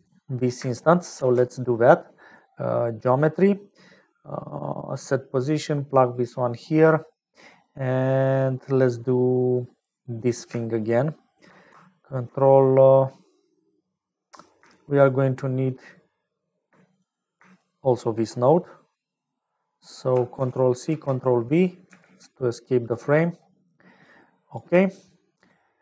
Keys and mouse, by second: 1.1 shift+a, 6.0 click, 7.4 click, 8.4 click, 9.3 click, 10.3 middle click, 10.8 shift+click, 14.2 click, 14.9 shift+click, 16.9 click, 17.8 shift+middle click, 18.9 click, 20.3 ctrl+c, 21.2 ctrl+v, 21.8 g, 24.1 click, 24.9 click, 25.7 click.